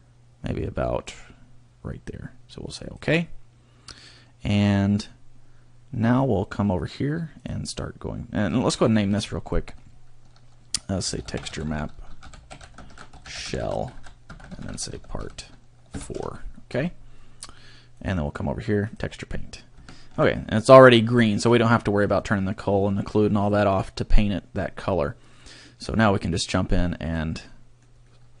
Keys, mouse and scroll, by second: 8.2 click, 8.7 click, 9.4 click, 19.1 click, 19.9 shift+middle click, 20.9 middle click, 26.5 click, 27.4 middle click, 28.0 middle click.